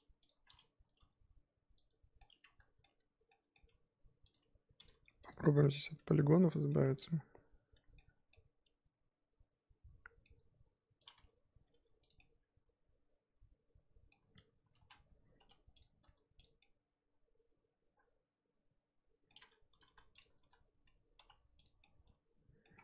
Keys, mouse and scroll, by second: 0.2 click, 0.8 g, 2.2-4.3 middle drag, 4.3 click, 4.9 g, 5.6-6.8 middle drag, 6.8 scroll down 2, 7.0-11.0 middle drag, 11.0 click, 11.6 g, 12.2-14.8 middle drag, 14.8 a, 15.8 m, 16.4 click, 16.6-19.7 middle drag, 19.7 g, 20.4 a, 21.6 m, 21.8-22.7 middle drag, 22.7-22.8 scroll up 4.